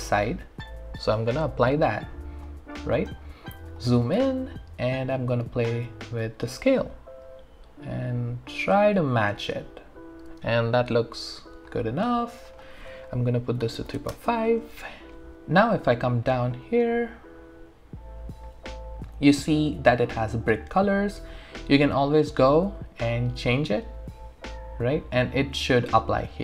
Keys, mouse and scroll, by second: 2.5 click, 2.7 alt+middle click, 3.2 alt+right click, 3.8 alt+click, 6.0 click, 9.9-11.8 alt+drag, 13.4-14.4 typing, 15.3 alt+right click, 16.0-16.7 scroll down 1, 16.7 scroll up 1, 17.1-17.9 scroll down 1, 21.4 click.